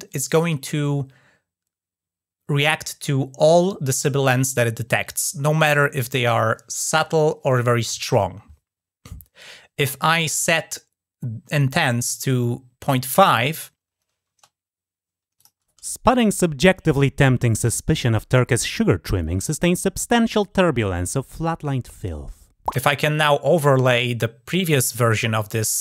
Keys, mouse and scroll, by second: 11.4-12.7 drag, 15.2 click.